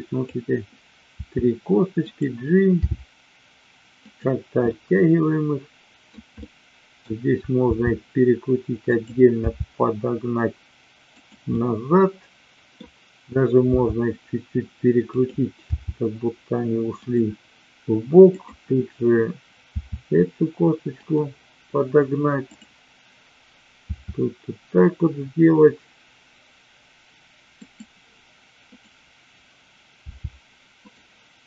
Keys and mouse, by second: 1.2 r, 2.1 click, 2.9 g, 4.1 click, 4.7-6.1 middle drag, 6.4-6.9 middle drag, 7.6 r, 8.9 click, 9.4 g, 11.4-12.7 middle drag, 13.7 r, 15.1 click, 15.7 g, 18.3-19.3 drag, 19.7 r, 22.4-23.3 drag, 23.9 r, 29.9 g, 30.8 click.